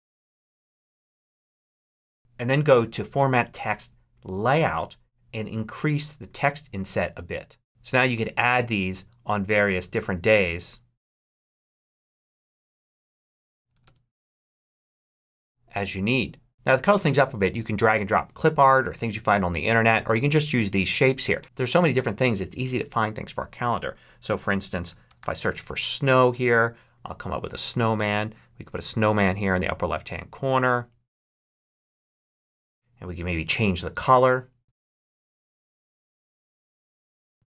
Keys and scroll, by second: 0.0-1.9 typing, 12.0-14.9 typing, 24.4-25.5 typing.